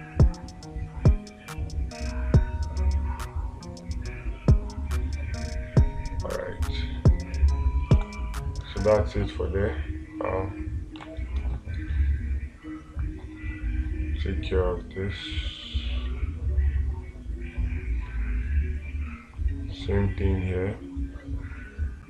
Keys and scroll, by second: 8.4 space, 11.5 space.